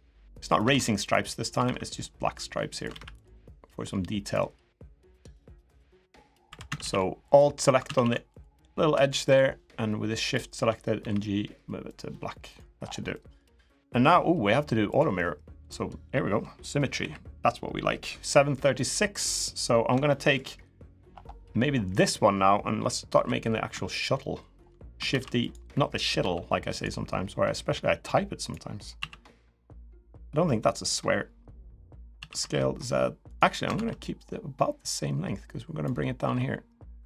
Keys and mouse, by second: 1.4 ctrl+r, 4.5 ctrl+r, 4.5 middle click, 5.9 click, 6.2 3, 6.4 a, 6.6 a, 9.3 alt+shift+a, 10.0 alt+shift+click, 10.7 g, 12.2 click, 12.9 middle click, 14.7 click, 15.4 click, 16.7 KP_1, 19.8 shift+middle click, 21.7 click, 22.9 KP_3, 24.0 shift+middle click, 24.9 shift+d, 25.9 s, 27.4 click, 28.7 s, 30.2 middle click, 31.9 s, 33.5 ctrl+z, 34.6-35.6 drag, 36.0 s.